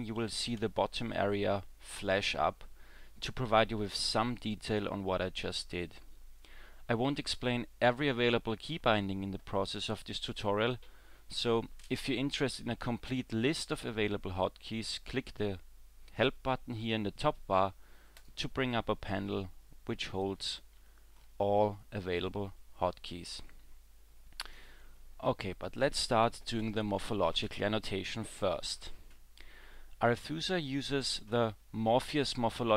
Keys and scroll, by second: 0.4 w, 0.6 w.